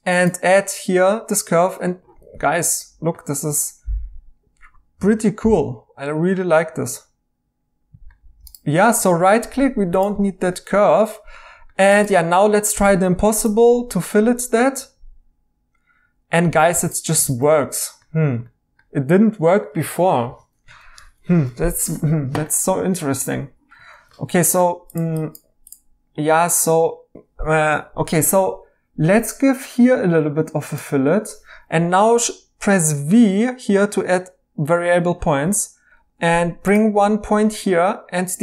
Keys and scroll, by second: 2.2 e, 9.1 e, 10.1 x, 12.0 Tab, 12.8 Tab, 16.7-17.2 typing, 20.2 e, 20.8 ctrl+z, 35.4 v.